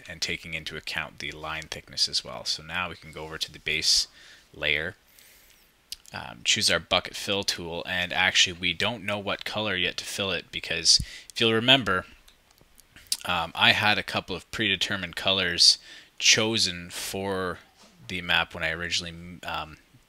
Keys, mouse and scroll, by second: 11.7-12.2 scroll down 1, 13.4-14.4 ctrl+drag.